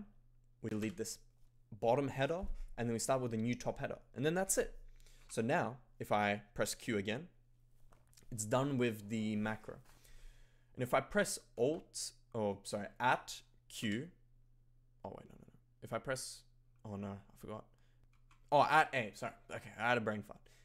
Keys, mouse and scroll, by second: 0.6 d, 5.3 Tab, 5.3 q, 11.6 shift+@, 13.8 q, 17.8-18.6 typing.